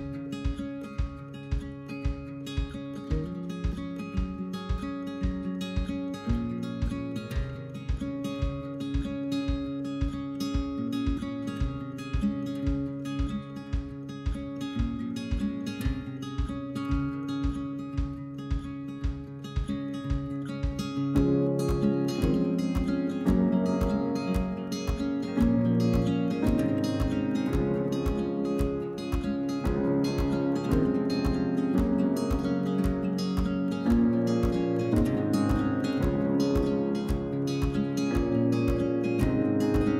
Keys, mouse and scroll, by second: 0.7 a, 3.4 click, 3.6 a, 4.4 click, 5.2 l, 5.5-6.6 middle drag, 6.9 click, 7.2 l, 7.5 middle click, 8.3 click, 8.6 l, 9.2-9.9 middle drag, 9.9-10.3 scroll down 1, 10.3 l, 12.1-13.1 middle drag, 13.2-13.7 scroll up 1, 13.7 shift+middle click, 14.0 scroll up 1, 14.2-14.9 scroll down 2, 14.4 middle drag, 14.9 shift+middle click, 15.4 scroll down 1, 15.5 a, 16.2 click, 17.8 l, 18.1-19.2 middle drag, 19.2 click, 19.5 l, 21.3 click, 21.8-24.6 middle drag, 24.8 click, 25.0 Tab, 25.5 Tab, 26.0-26.5 middle drag, 26.5 scroll down 1, 26.6 middle click, 26.8 scroll up 2, 27.1-30.5 middle drag, 30.5 click, 30.7-31.1 shift+middle drag, 31.1 KP_3, 31.3-32.0 scroll up 2, 32.0 alt+click, 33.9 right click, 34.0 scroll down 3, 34.2 shift+middle click, 35.0-35.3 scroll up 3, 35.3 alt+click, 35.8 alt+click, 35.9 scroll down 1, 36.1 shift+middle click, 36.6 right click, 36.8 click, 37.7 scroll down 1, 37.8-38.5 shift+middle drag, 38.5 right click, 38.7 click, 38.8-39.4 middle drag, 39.4-39.8 scroll up 1, 39.8 l.